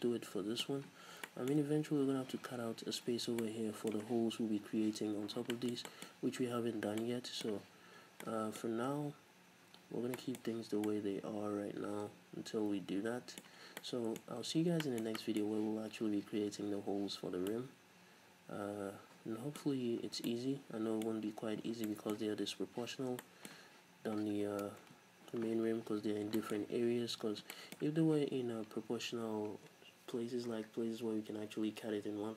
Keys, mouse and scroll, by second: 5.2 scroll up 2, 6.6-7.0 scroll up 2, 8.0 scroll down 2, 9.8-10.2 scroll up 2, 10.8 scroll down 2, 13.6 scroll down 2, 14.3-14.8 scroll up 2, 21.7 scroll down 2, 23.0 scroll down 2, 25.0 KP_3, 25.5-26.4 scroll up 4, 25.9 z, 26.4-31.5 shift+middle drag.